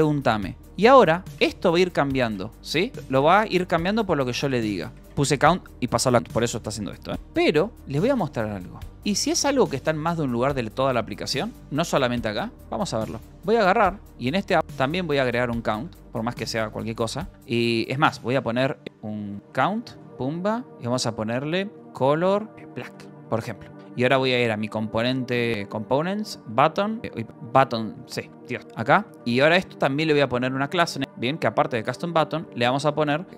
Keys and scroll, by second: 0.0-0.9 typing, 7.1 Escape, 7.9 ctrl+c, 8.8 ctrl+j, 12.5 Return, 12.9-15.1 typing, 14.0 Return, 16.3 ctrl+s, 16.4-20.0 typing, 21.5-23.7 typing, 25.0 j, 25.3 k, 25.6 Return, 26.6-31.5 typing, 32.7 a, 32.9 space, 33.3 t.